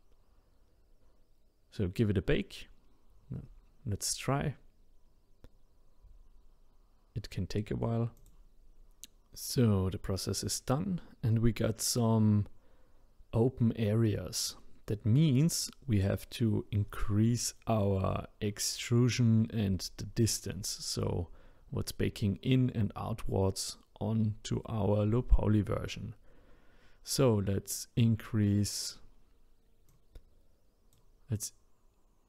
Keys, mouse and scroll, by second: 6.1 click, 16.7-17.9 scroll up 1.